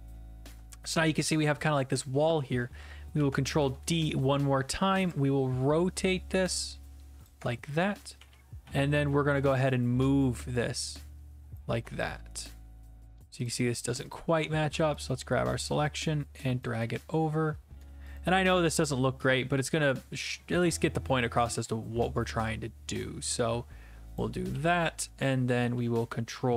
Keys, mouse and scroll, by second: 0.0-0.7 typing, 1.3 right click, 3.2 ctrl+d, 3.6 e, 7.2 ctrl+click, 8.2-9.1 typing, 11.5 ctrl+click, 13.5 click, 14.1 click, 14.7 q, 15.0 click, 16.8-17.7 d, 17.8 middle click, 17.8 d, 18.2 click, 18.9-19.7 typing, 24.2 click, 24.5-25.6 typing, 25.6 middle click.